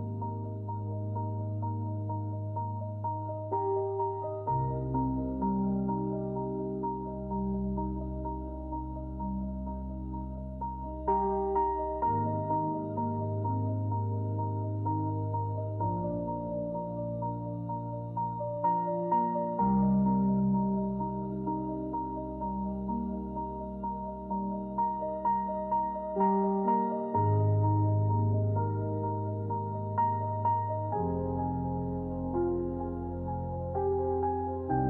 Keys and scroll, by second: 2.7 b, 3.3 Return, 5.8 shift+x, 7.7 shift+w, 11.1 Tab, 14.3 Return, 15.4 Delete, 18.6 j, 33.2 Escape.